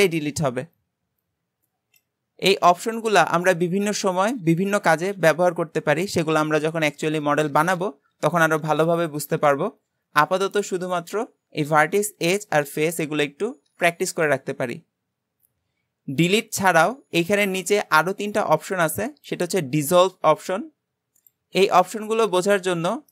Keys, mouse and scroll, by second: 22.6-22.9 scroll down 1, 22.9 shift+middle click.